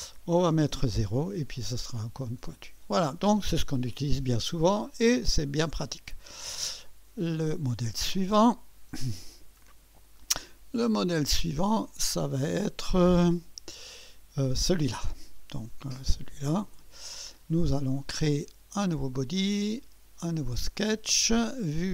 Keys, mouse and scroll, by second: 0.3-1.7 typing, 1.6-3.7 drag, 3.4-4.4 typing, 3.7-4.1 scroll up 1, 4.4-6.1 drag, 6.8 click, 8.9 click, 11.0 click, 13.2 click, 16.7 click, 19.1 click, 20.7 click.